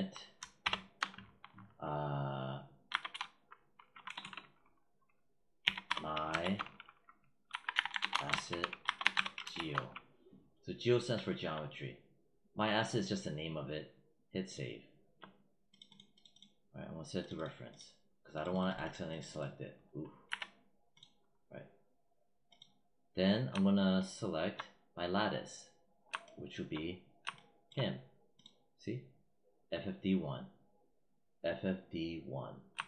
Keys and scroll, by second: 0.5 shift+-, 2.7 g, 3.0 e, 3.9 BackSpace, 5.5-9.9 typing, 20.1 z.